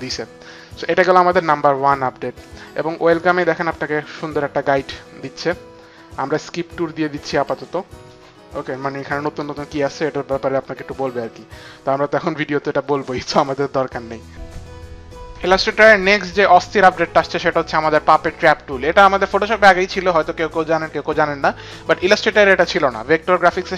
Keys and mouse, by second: 7.4 click.